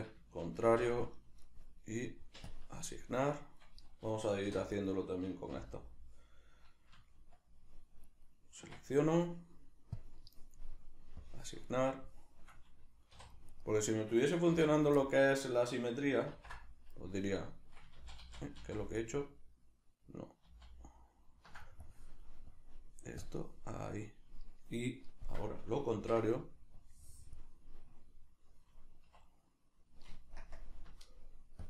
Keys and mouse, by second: 0.7 ctrl+i, 2.5 click, 3.0-4.7 shift+middle drag, 4.5 3, 4.7 right click, 5.5 l, 8.1 right click, 8.6 Tab, 10.0 Tab, 11.2 click, 11.8-13.5 shift+middle drag, 13.2 3, 13.5 right click, 14.6 l, 15.0-21.8 middle drag, 16.3 ctrl+i, 21.8-25.9 drag, 25.9 ctrl+i, 26.8-31.6 drag, 29.1 1, 30.4 ctrl+KP_Subtract.